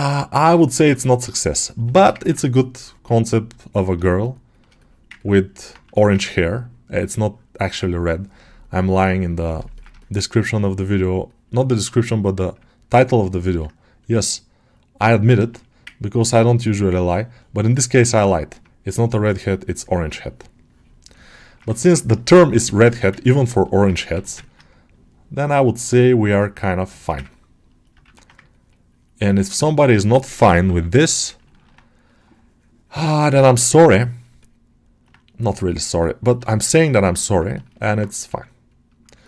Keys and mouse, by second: 0.4 alt+middle click, 1.1 click, 1.8 alt+shift+middle click, 2.1 ctrl+alt+middle click, 3.1 click, 3.9 shift+click, 4.7 alt+middle click, 5.1 ctrl+middle click, 7.2-9.5 drag, 9.6 ctrl+alt+middle click, 9.9 shift+middle click, 10.8-12.4 drag, 12.5 ctrl+click, 13.1 ctrl+middle click, 13.9-15.0 ctrl+drag, 15.1 ctrl+alt+middle click, 15.8 ctrl+click, 16.5 ctrl+click, 18.0-20.0 drag, 20.7 ctrl+click, 21.0 ctrl+alt+middle click, 22.0 shift+click, 22.5 alt+shift+middle click, 23.1 ctrl+alt+click, 23.5 alt+middle click, 24.3 ctrl+alt+middle click, 24.8-26.7 drag, 26.8 alt+shift+middle click, 27.1 ctrl+alt+middle click, 28.2 ctrl+1, 28.4 click, 29.5 alt+shift+middle click, 29.8 middle click, 31.3 ctrl+alt+middle click, 31.9-33.4 drag, 34.3 alt+middle click, 35.1 click, 35.9 alt+middle click, 36.5 shift+click, 36.9-38.5 alt+middle drag, 38.5 click, 39.1 ctrl+alt+middle click.